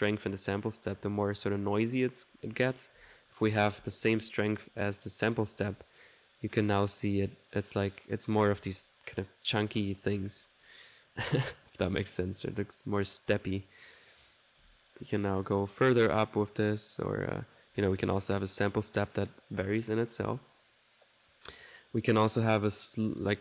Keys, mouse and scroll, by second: 2.3 click, 5.6 1, 14.3 click, 17.4 click, 22.2 click.